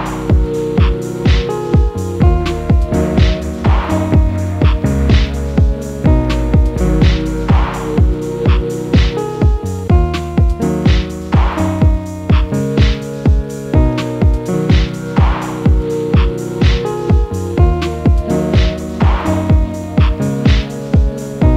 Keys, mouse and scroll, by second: 4.1-5.0 typing, 7.9 typing, 15.9 double click, 20.7 double click.